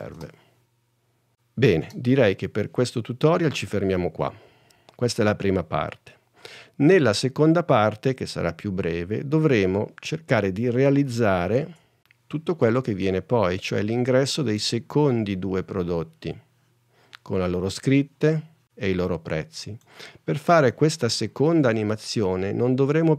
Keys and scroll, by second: 0.3 space, 2.9 space, 12.6 super+Tab.